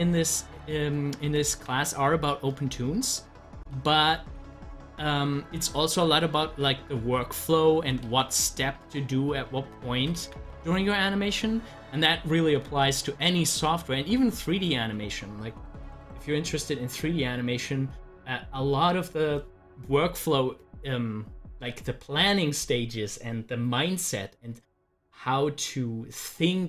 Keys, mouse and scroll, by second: 1.5 ctrl+z, 3.7 ctrl+z, 8.1 z, 8.7-10.2 drag, 10.2 ctrl+z, 16.0 click, 25.6 click.